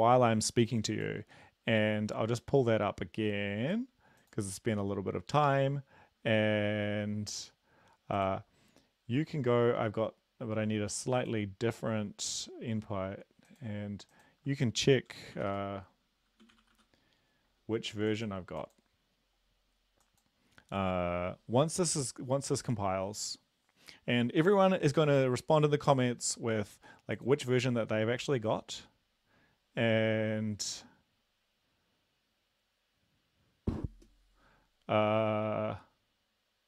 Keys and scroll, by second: 15.1-16.7 typing.